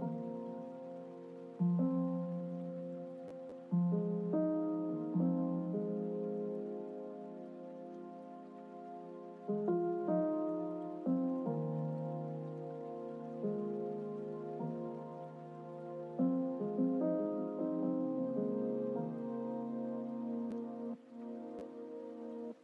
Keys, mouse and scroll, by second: 1.4 click, 3.2 click, 4.8-9.7 drag, 15.2-17.8 drag, 22.3-22.6 drag.